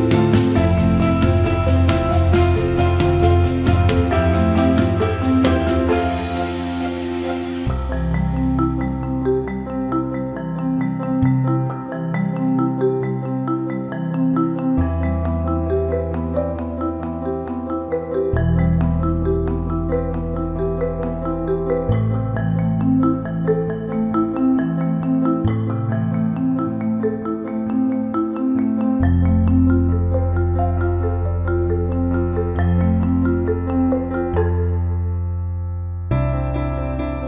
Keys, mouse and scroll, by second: 0.9-1.3 alt+middle drag, 1.7-2.1 alt+drag, 2.3 alt+drag, 2.6 alt+shift+click, 2.9 ctrl+middle drag, 3.1 alt+middle drag, 4.0 alt+middle click, 4.8-6.3 drag, 6.6 alt+middle click, 7.1 click, 7.7-9.7 alt+middle drag, 10.1 alt+middle click, 11.3-11.7 alt+middle drag, 12.5 click, 13.7-15.1 shift+drag, 15.4 alt+middle click, 16.3 alt+middle click, 16.9 click, 17.9 alt+middle click, 18.2 alt+shift+middle click, 18.5 alt+middle click, 20.1 click, 20.9 alt+middle click, 21.3 click, 21.9 Tab, 22.5 alt+middle click, 25.0 click, 26.2 alt+middle click, 26.5 alt+shift+middle click, 26.9 alt+middle click, 28.1 shift+click, 28.5 alt+middle click, 30.6 shift+click, 31.0 alt+middle click, 31.5 alt+middle click, 32.0 ctrl+alt+middle click, 32.7 shift+click, 33.7 ctrl+b.